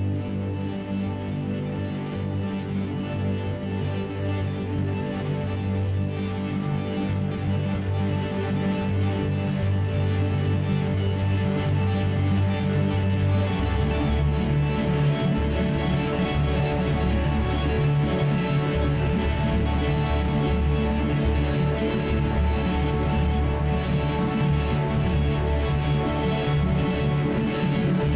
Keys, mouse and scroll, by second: 0.5 g, 9.6 alt+k, 11.9 g, 14.4 g, 16.9 alt+k, 18.6-22.4 right drag, 22.5 alt+k, 24.0-27.8 right drag, 25.0 g.